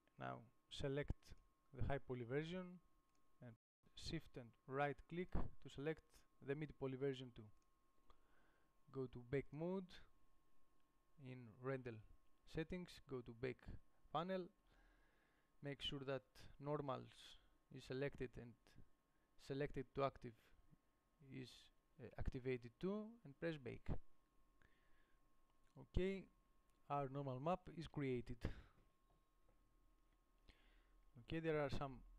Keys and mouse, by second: 0.0-1.6 middle drag, 2.5 g, 7.3 g.